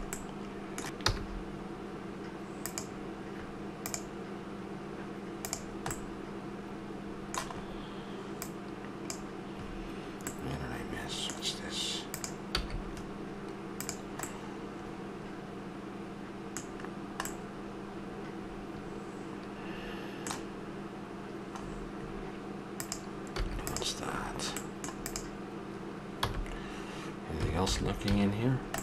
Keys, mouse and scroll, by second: 0.6 KP_7, 1.0 g, 6.0-8.4 middle drag, 8.4-9.7 drag, 10.3-11.9 middle drag, 12.1 click, 12.5 x, 14.2-16.2 middle drag, 16.9-19.0 middle drag, 21.5-22.7 middle drag, 22.7-24.7 drag, 23.3 x, 25.2 click, 26.2 h, 27.7 alt+h, 28.0 a.